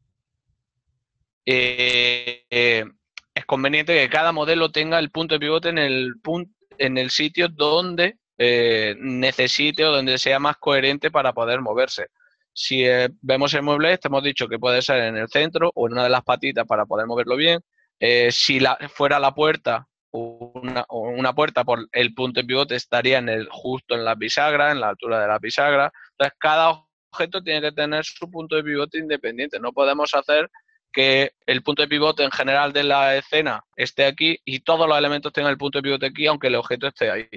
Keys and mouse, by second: 12.6 click, 16.8 alt+click, 26.0 alt+click, 33.0 ctrl+middle click, 34.8 click.